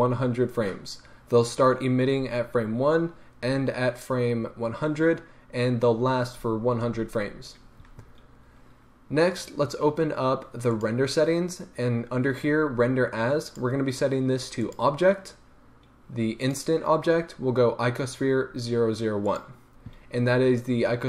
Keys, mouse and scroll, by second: 12.7-13.4 scroll down 1, 13.4-21.0 drag.